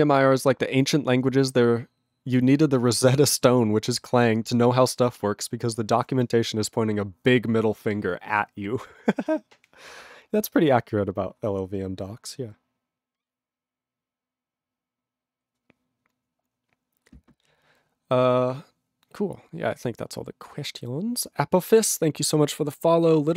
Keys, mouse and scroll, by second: 5.9 ctrl+a.